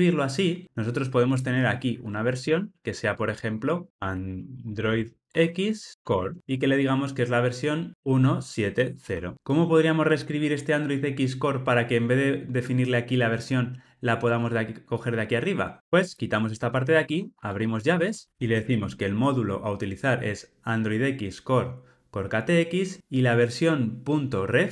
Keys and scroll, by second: 15.8 super+z.